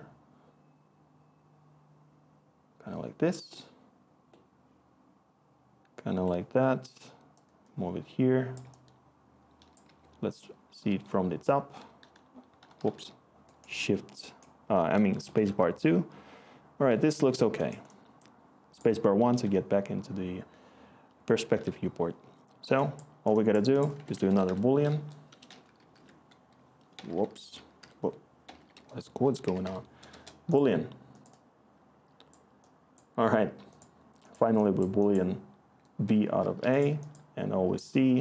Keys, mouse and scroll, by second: 9.8-12.7 typing, 17.0 1, 23.9-26.9 typing, 29.4-30.5 typing, 36.5 e.